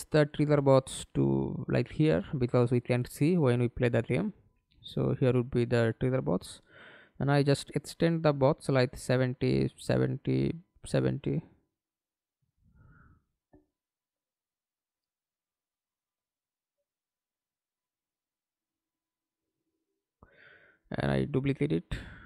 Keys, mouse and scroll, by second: 4.1 r, 6.6 7, 6.9 0, 7.3 Return, 9.4-10.1 typing, 12.0 7, 12.3 0, 12.6 Return, 13.8 middle click, 14.4 w, 17.8 scroll down 1, 18.0 alt+click, 19.4 alt+click.